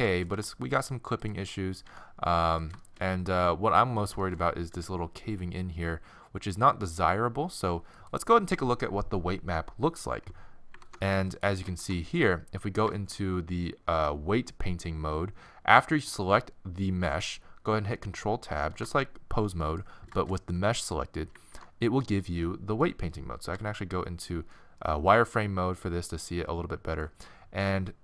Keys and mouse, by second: 0.4 r, 1.9 r, 2.8-4.0 middle drag, 4.0 right click, 4.8 r, 5.9 click, 10.8 ctrl+Tab, 11.4 click, 11.8 ctrl+Tab, 18.8 ctrl+Tab, 21.5 ctrl+Tab, 23.6 z, 25.3-27.6 middle drag.